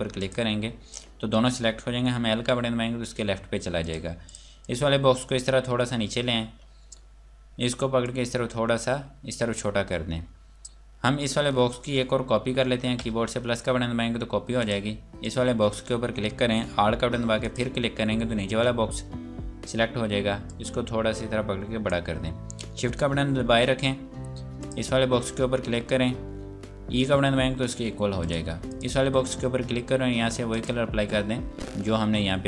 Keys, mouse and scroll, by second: 0.2 shift+click, 2.3 l, 3.8 click, 8.0 click, 12.8 KP_Add, 14.2-14.6 scroll up 1, 14.6 click, 17.4 click, 20.4 click, 24.6 shift+click, 27.1 e, 28.2 click, 31.3-31.6 scroll down 1.